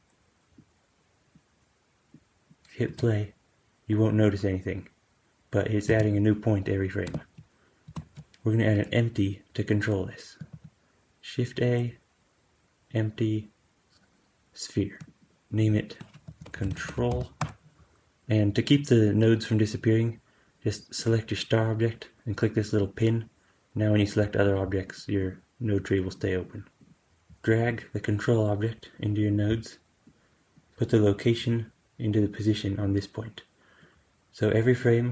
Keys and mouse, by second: 2.8 space, 5.8 space, 7.8 shift+Left, 10.4 shift+a, 15.4-20.9 drag, 22.7 click, 24.3 click, 25.6 click, 26.7-29.2 drag, 30.0-35.1 drag.